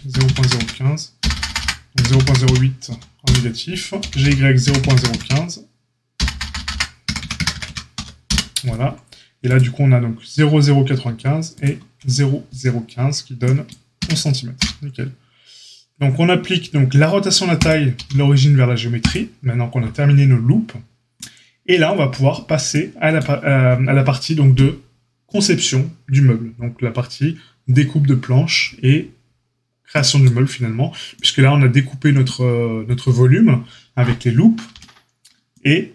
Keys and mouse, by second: 3.9 g, 9.5-11.0 drag, 11.5 shift+click, 13.9 Tab, 14.5 q, 17.9 q.